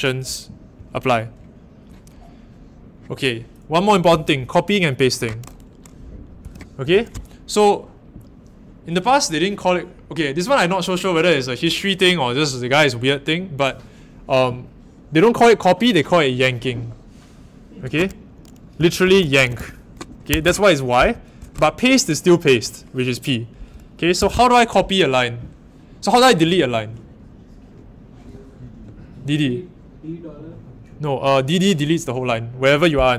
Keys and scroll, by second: 0.7 shift+;, 6.4 k, 18.5-21.3 typing, 20.3 Home, 24.1 k.